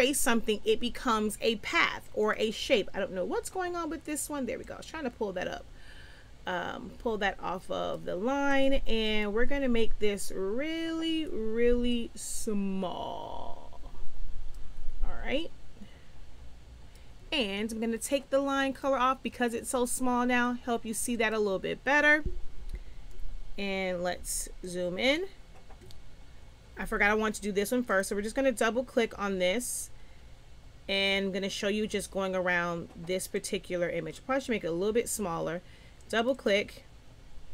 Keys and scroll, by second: 23.4 z.